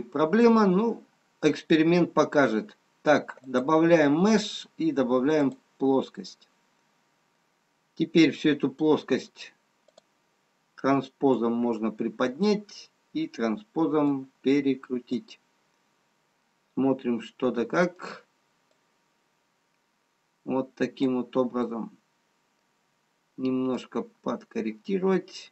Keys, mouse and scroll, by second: 3.3 click, 6.3 middle click, 9.8 click, 18.1 middle click, 19.0 click, 21.7 middle click, 24.1 click.